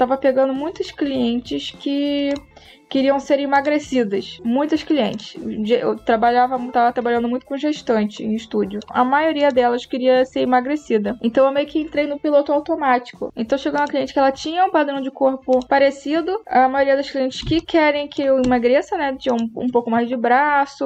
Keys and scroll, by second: 17.3 space.